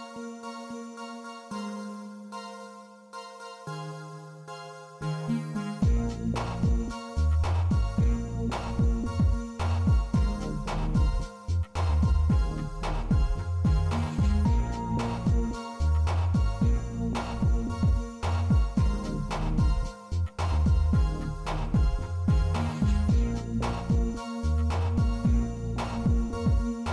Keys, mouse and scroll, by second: 2.2-5.5 middle drag, 5.7-6.1 middle drag, 6.3 shift+middle click, 7.1-10.1 drag, 10.7-11.8 middle drag, 12.7 click, 15.1 click, 15.7-17.7 drag, 17.2 s, 19.3 click.